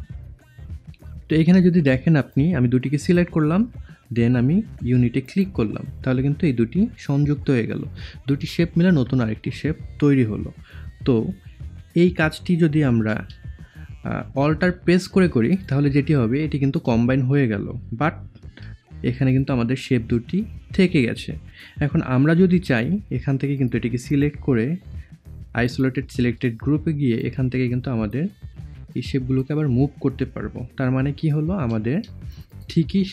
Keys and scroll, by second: 12.0 ctrl+y, 13.0 ctrl+z, 18.4 ctrl+y, 22.1 ctrl+y, 30.9 ctrl+z.